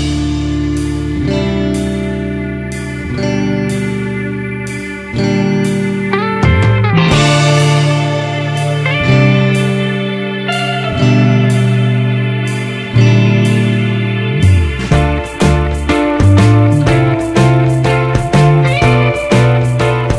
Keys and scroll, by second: 2.2 Return, 7.4 ctrl+0, 8.7 ctrl+=.